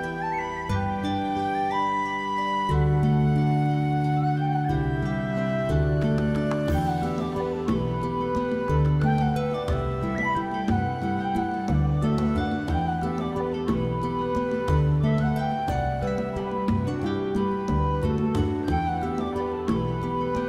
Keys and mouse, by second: 0.3 right click, 0.6 s, 2.0 right click, 2.3 shift+middle click, 2.6 s, 3.3 right click, 3.5 middle click, 3.8 middle click, 4.2 shift+middle click, 4.7 1, 4.9 alt+middle click, 5.1 alt+middle click, 5.3 shift+middle click, 5.7 g, 7.5 click, 7.7 shift+middle click, 7.9 shift+middle click, 8.2 click, 8.4-11.1 typing, 9.2 click, 9.4 click, 9.9 click, 10.2 click, 10.7 click, 11.3 click, 11.5 middle click, 12.1 shift+middle click, 12.2 middle click, 12.6 middle click, 12.8 click, 13.0 middle click, 13.5 /, 13.8 middle click, 13.9 shift+middle click, 14.4 g, 15.1 middle click, 15.5 middle click, 15.8 middle click, 16.0 alt+middle click, 16.2 alt+middle click, 16.9 g, 17.2 click, 17.5 middle click, 18.3 click, 18.4 middle click, 18.7 middle click, 19.0 click, 19.2 middle click, 19.4 middle click, 19.6 alt+middle click, 19.9 shift+middle click, 20.3 g.